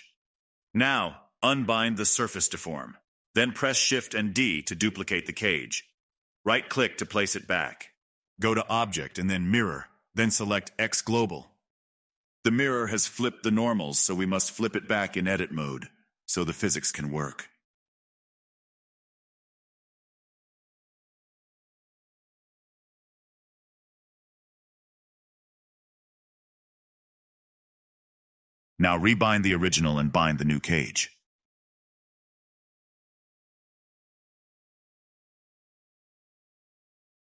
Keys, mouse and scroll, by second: 1.7 click, 2.6 click, 3.8-6.2 right drag, 3.8 middle click, 6.2 shift+d, 8.1-10.3 drag, 10.3-12.0 right drag, 10.3 middle click, 12.0-13.1 drag, 13.1 a, 15.2 click, 15.7 a, 17.2-20.2 drag, 20.2-22.7 right drag, 20.2 middle click, 22.7-23.5 drag, 24.4 space, 26.5 space, 27.0-29.8 drag, 30.5 scroll down 2, 32.1-36.0 drag, 36.9 click.